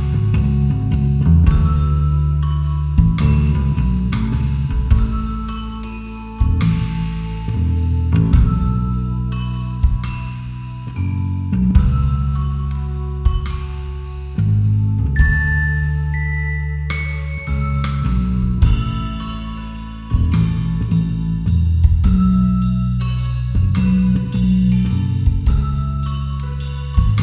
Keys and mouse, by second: 0.7 s, 1.3 click, 1.5 g, 3.1 click, 3.7 click, 4.3 g, 5.9 click, 6.2 Tab, 6.9 Tab, 7.5 g, 8.3 click, 8.6 Tab, 11.0 Tab, 11.1 a, 11.6 s, 12.0 y, 12.3 KP_0, 13.1 KP_Enter, 16.2 Tab, 18.5 shift+a, 21.6-24.9 typing, 22.4 KP_Enter, 24.0 KP_Enter, 25.6 KP_Enter, 26.3-27.2 typing.